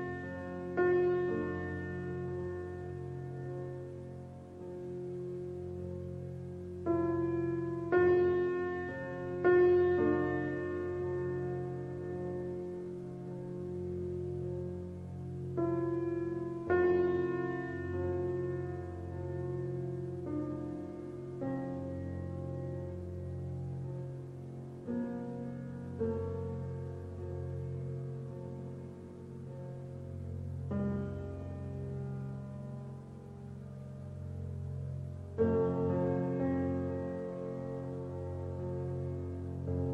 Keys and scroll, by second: 9.4 space, 16.6 Return, 16.8-19.7 typing, 17.6 Return, 20.9 shift+4, 21.1 KP_6, 21.3 KP_9, 22.6 ctrl+a.